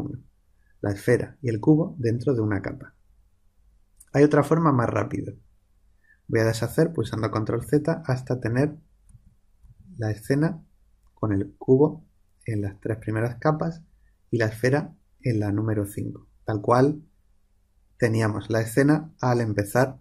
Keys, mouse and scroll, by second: 7.0 ctrl+z, 7.6 ctrl+z, 8.3 ctrl+z, 9.0 ctrl+z, 9.6 ctrl+z.